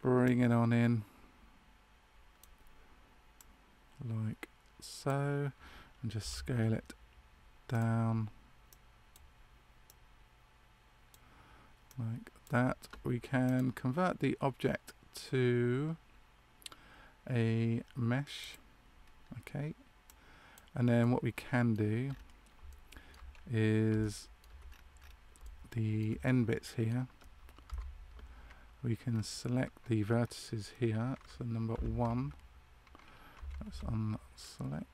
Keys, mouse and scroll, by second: 3.3 click, 6.1 s, 8.6 click, 20.0 click, 20.9 middle click, 22.0-22.3 scroll up 4.